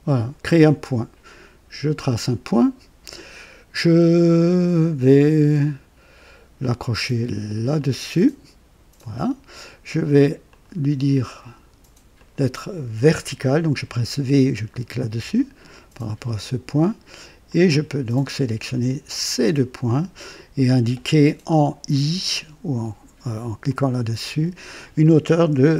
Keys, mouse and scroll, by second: 2.0 click, 7.7 click, 9.0 right click, 10.4 click, 12.1 click, 15.0 v, 17.4 click, 19.2 click, 23.7 click, 25.5 KP_2, 25.7 KP_0.